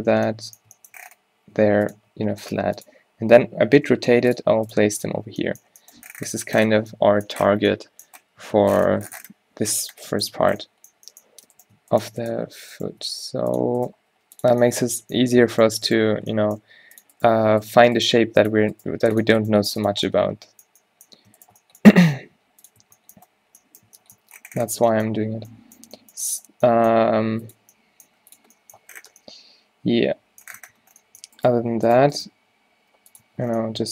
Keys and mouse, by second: 1.6 g, 1.9 r, 2.6 g, 4.0 g, 4.5 r, 4.9 g, 5.3 z, 8.7 Tab, 9.8 Tab, 11.8-14.7 drag, 13.1 g, 14.1 g, 15.8 click, 16.6 click, 16.6 g, 17.4 right click, 18.2 click, 18.2 g, 18.9 g, 19.5 g, 22.1 g, 22.9 Tab, 24.9 Tab, 27.0 g, 28.2 g, 31.1 Tab, 31.3 Tab, 32.4 q, 32.9 g, 33.3 Tab.